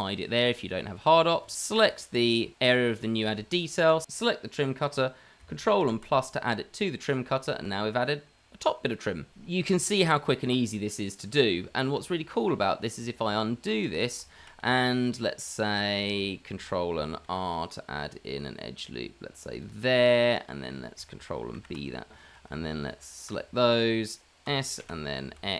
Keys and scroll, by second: 6.5 KP_Add, 12.5 ctrl+z, 13.7 ctrl+z, 14.4 ctrl+z, 14.6 Tab, 16.2 ctrl+z, 16.2 Tab, 17.5 Tab, 17.5 ctrl+r, 21.9 ctrl+b, 24.5 s.